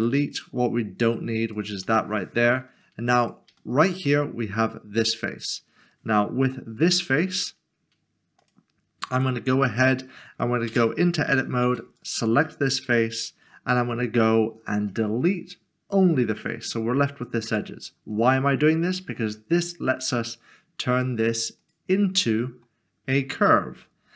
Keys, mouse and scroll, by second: 0.3 double click, 1.1 click, 1.8 double click, 2.4 Delete, 2.6 middle click, 3.3 click, 3.6 shift+middle click, 4.6-5.3 scroll up 1, 5.3 scroll down 1, 8.4 click, 9.6 middle click, 10.7 Tab, 11.7 3, 12.0 click, 15.9 x, 18.2 Tab.